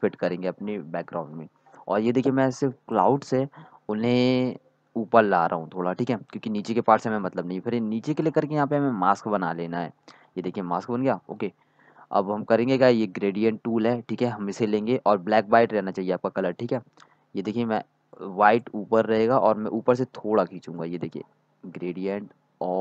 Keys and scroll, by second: 17.3 x.